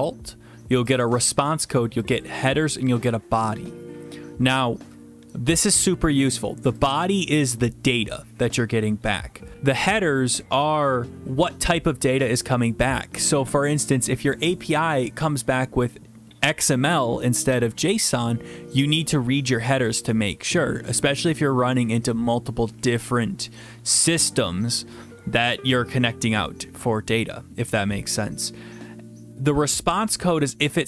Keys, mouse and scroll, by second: 1.0 click, 1.1 click, 2.1 click, 2.2 click, 2.8 click, 3.0 click, 6.9 click, 7.0 click.